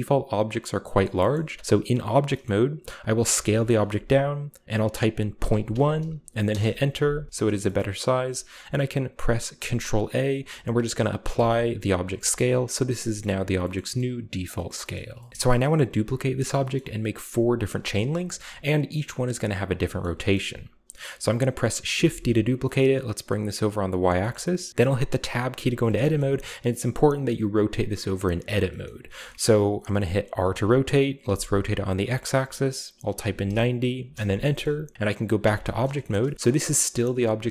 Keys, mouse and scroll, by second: 1.0 middle drag, 1.3-1.9 shift+middle drag, 2.4 middle click, 3.3 s, 5.3-5.7 typing, 6.5 Return, 7.3-8.6 scroll up 2, 7.6-8.3 shift+middle drag, 8.3 ctrl+a, 10.5 ctrl+a, 11.3-12.1 drag, 12.3 shift+middle drag, 13.0 middle drag, 13.2-13.6 shift+middle drag, 13.7 shift+middle click, 14.0-15.2 shift+middle drag, 14.0-14.9 scroll up 1, 15.3-15.8 scroll up 1, 15.4-15.8 shift+middle drag, 16.6-17.3 shift+middle drag, 17.8-18.6 shift+middle drag, 17.9-18.6 shift+scroll up 1, 19.4-20.0 scroll down 2, 19.8-20.8 shift+middle drag, 20.9-21.8 scroll up 2, 22.0 shift+d, 22.8-23.9 middle drag, 23.9 shift+click, 24.2 shift+middle click, 25.5 a, 25.7 a, 26.0-28.6 shift+middle drag, 26.2-28.6 shift+scroll up 2, 28.8-30.1 shift+middle drag, 30.3 r, 31.2 x, 33.1 typing, 34.0 Return, 34.2-34.9 scroll down 1, 34.6 middle click, 35.4 Tab, 35.8-36.2 shift+middle drag, 36.0 shift+scroll up 2.